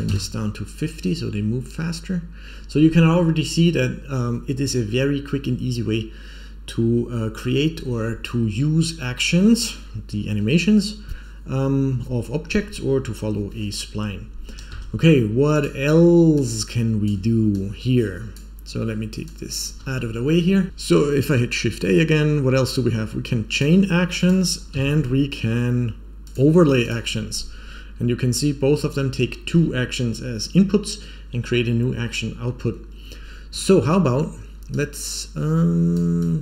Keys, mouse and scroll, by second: 14.6 space, 15.5 click, 16.3 click, 17.5 click, 19.2 click, 20.4 scroll down 1, 20.7 shift+a, 24.8 shift+a, 27.3-27.7 scroll down 2, 27.6 scroll up 4, 34.6-35.9 drag, 36.1-36.4 drag.